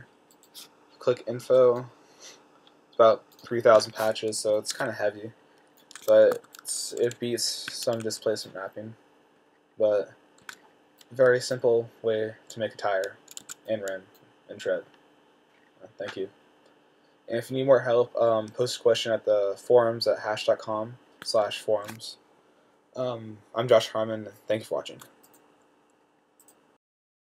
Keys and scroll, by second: 4.7 t, 6.6 z, 7.9 q, 8.3 q, 10.7 q, 13.7 q.